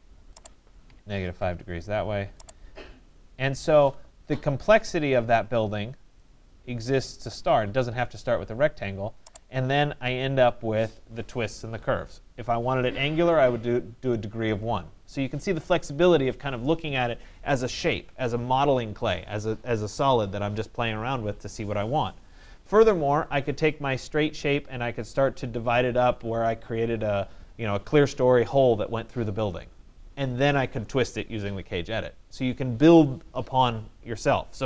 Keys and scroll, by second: 0.9 -, 1.2 5, 1.4 Return.